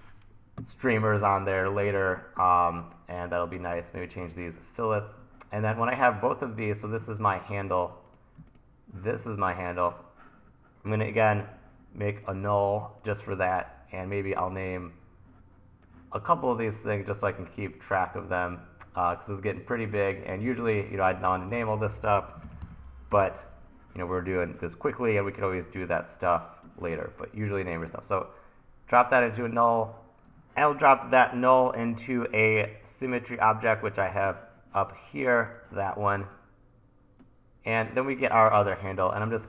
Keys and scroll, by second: 3.8 2, 22.1-23.2 typing, 24.5 super+s, 34.9 super+z.